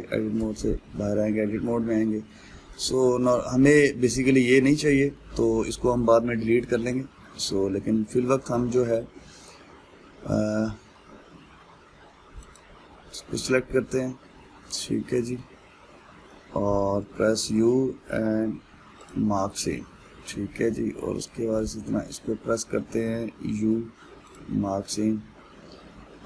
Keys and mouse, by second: 1.0 Tab, 1.6-11.7 middle drag, 13.2 alt+click, 13.8-16.9 middle drag, 20.7-22.3 middle drag, 22.3 alt+click, 23.0-24.9 middle drag, 24.9 u, 25.5-26.2 middle drag.